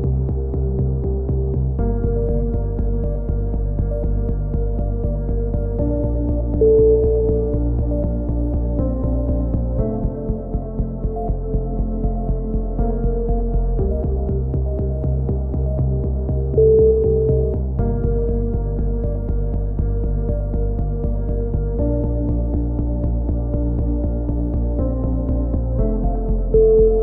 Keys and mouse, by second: 0.6-1.2 drag, 2.6 a, 3.1 alt+r, 4.7 x, 5.7 a, 6.2 ctrl+n, 6.7 a, 6.8-7.5 middle drag, 11.1 middle click, 11.4 KP_3, 12.8 z, 15.2 middle click, 15.5 z, 17.7-18.7 middle drag, 18.7-19.5 drag, 19.5-20.0 middle drag, 20.1 alt+m, 21.2 click, 21.6 alt+m, 22.2 z, 22.4 z, 22.6-24.3 drag, 23.2 z, 23.8 alt+m, 24.4 z, 24.9 right click, 25.2 alt+m, 25.9 a, 26.4 z, 26.6-27.0 right drag.